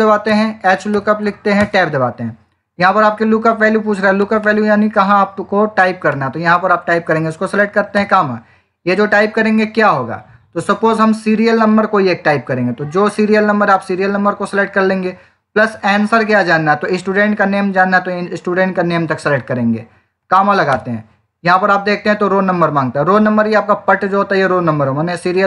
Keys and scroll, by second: 0.0-1.1 typing.